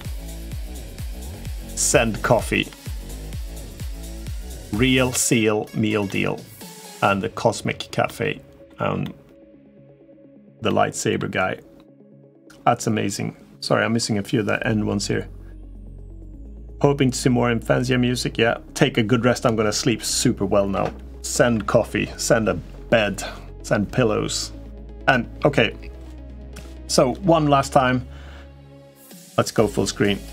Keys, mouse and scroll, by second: 0.3-0.9 middle drag, 2.4-3.4 middle drag, 4.1 middle click, 5.8-6.8 middle drag, 7.8-8.4 middle drag, 8.8-9.9 middle drag, 9.9 click, 9.9 right click, 10.0 middle click, 10.4 middle drag, 10.6 click, 10.6 right click, 10.7 middle drag.